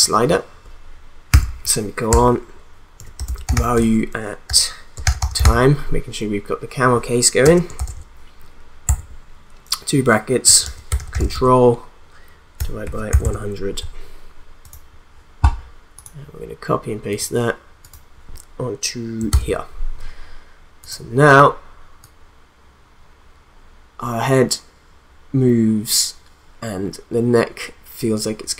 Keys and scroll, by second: 1.3 ;, 2.1 Return, 2.7-5.9 typing, 7.4-8.4 typing, 8.9 Left, 10.2-13.6 typing, 19.3 ctrl+v.